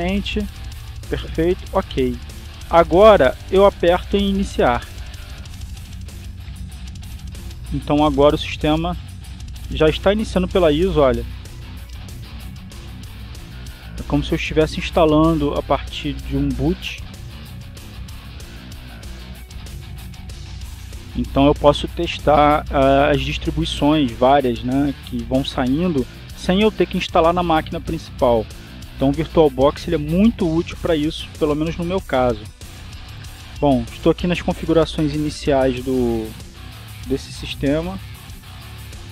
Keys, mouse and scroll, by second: 0.6 click, 3.0 click, 6.0 click, 11.6 Down, 12.2 Up, 13.4 Return, 16.6-17.9 drag, 31.1-32.2 drag, 35.0 click, 37.8 click.